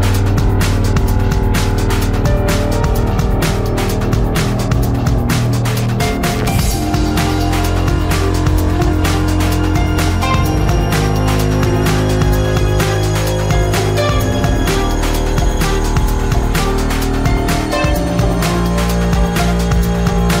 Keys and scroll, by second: 18.4 space, 20.2 space.